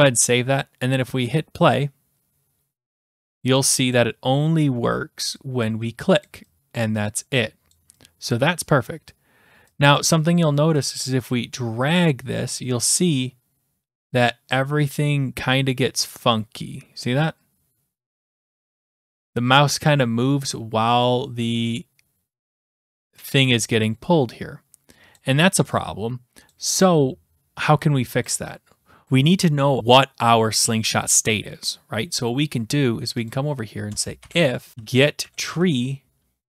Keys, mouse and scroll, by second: 1.4 click, 3.1 click, 4.0 click, 5.7 click, 6.3 click, 6.8 click, 7.8 click, 8.3 click, 10.0 click, 25.1 click, 26.5-27.6 drag, 28.3 click, 33.3-34.4 drag, 33.9 Return, 34.0-36.0 typing.